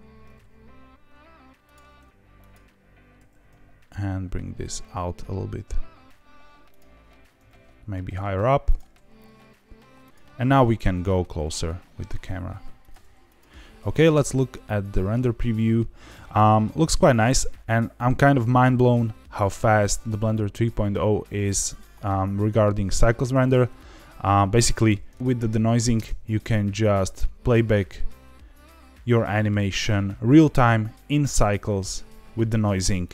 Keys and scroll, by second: 0.2 g, 0.3 z, 3.1 g, 3.2 z, 3.4 z, 7.3 g, 7.4 z, 10.6 g, 10.8 z, 11.0 z, 12.9 g, 14.0 z, 25.9 space.